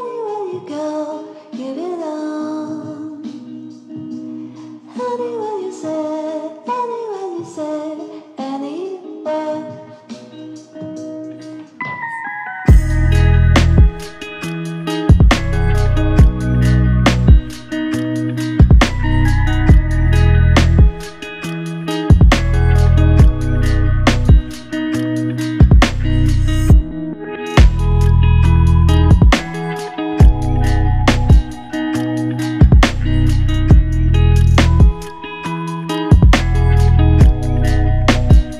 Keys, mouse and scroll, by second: 2.1 ctrl+click, 6.3 shift+click, 9.1 f, 10.8 shift+click, 14.4 shift+click, 17.3 alt+click, 18.2 alt+l, 18.5 ctrl+alt+click, 22.7 f, 24.1 double click, 28.9 alt+shift+click, 29.9 alt+click.